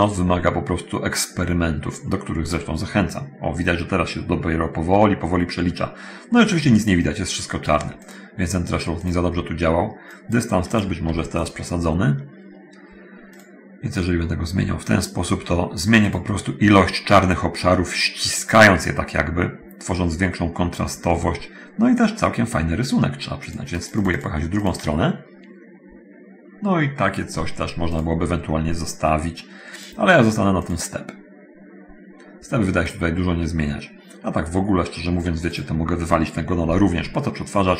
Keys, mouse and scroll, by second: 8.2 click, 9.2 click, 10.0 click, 10.9 click, 13.2 click, 18.6 click, 23.6 click, 24.8 click, 29.6 click, 30.8 click, 32.7-33.2 drag, 36.8 ctrl+x.